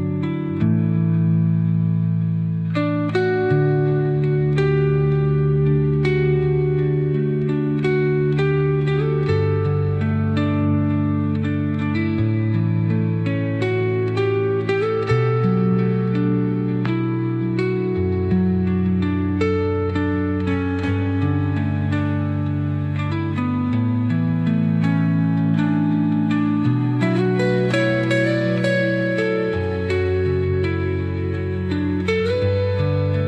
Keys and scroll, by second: 11.5 space, 22.4 space, 23.6 space, 27.5 Delete.